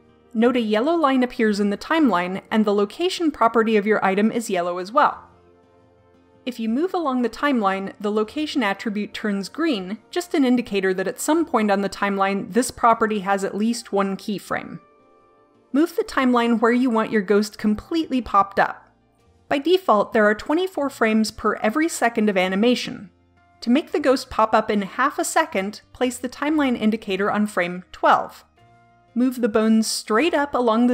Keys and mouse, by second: 7.4-9.3 drag, 26.2-27.5 drag, 30.1 click.